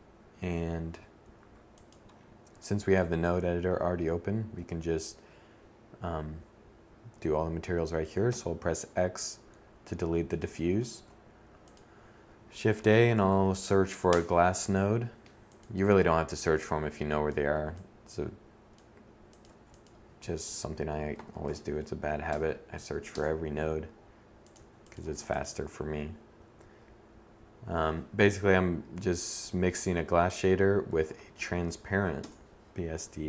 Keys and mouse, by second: 0.4-7.0 drag, 7.0 x, 8.9-12.7 drag, 9.6 shift+a, 14.9-21.3 drag, 18.1 shift+a, 23.2 click, 23.7 shift+a, 32.3-33.2 drag.